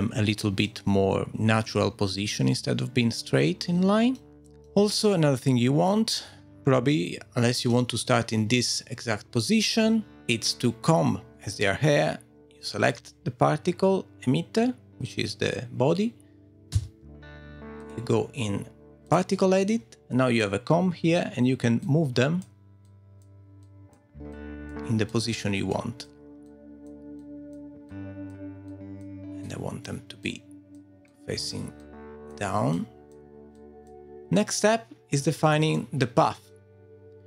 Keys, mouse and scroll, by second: 0.9-1.3 scroll down 1, 1.6 scroll up 4, 2.3 middle click, 4.4 middle click, 4.6 shift+middle click, 4.6 scroll down 2, 4.9 middle click, 8.5 middle click, 11.3 middle click, 16.7 Tab, 17.8 middle click, 18.7 click, 21.8 click, 24.0 click, 25.1 click, 26.5 click, 28.1-29.4 click, 28.7 click, 30.2 click, 34.4 scroll down 2, 34.7-35.1 scroll up 2, 34.9 shift+middle click, 35.1 scroll down 2.